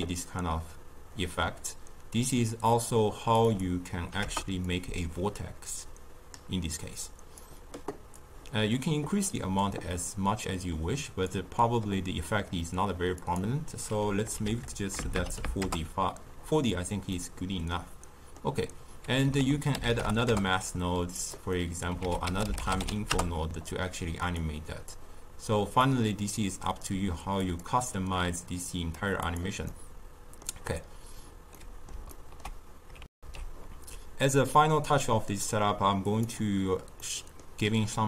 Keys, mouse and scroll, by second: 3.4-7.7 drag, 8.1-11.2 drag, 13.1-15.0 drag, 15.0 BackSpace, 17.1-19.3 middle drag, 19.3 ctrl+a, 21.5 middle click, 21.9 ctrl+a, 24.8-29.6 drag, 29.6-33.0 middle drag, 33.0 alt+shift+q, 36.0-37.0 drag, 37.0-38.0 middle drag.